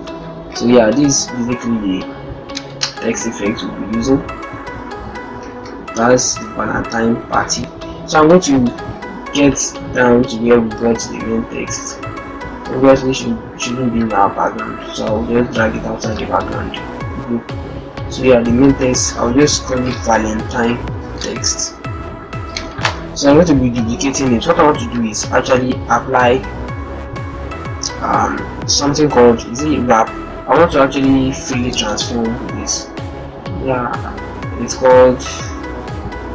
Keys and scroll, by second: 0.2 ctrl+shift+d, 0.2 ctrl+shift+Down, 5.4 shift+Up, 6.0 Up, 7.0 shift+Up, 19.6 shift+v, 23.4 ctrl+shift+j, 25.6 ctrl+e, 31.4 ctrl+t.